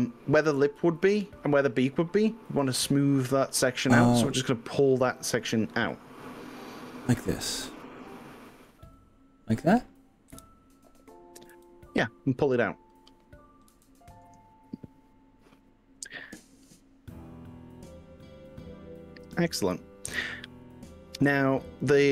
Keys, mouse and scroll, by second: 5.2 click, 5.9-8.8 middle drag, 10.3 KP_1, 11.6 g, 13.8 x, 16.4-17.2 scroll up 4, 19.2-19.6 scroll up 2, 21.8 click.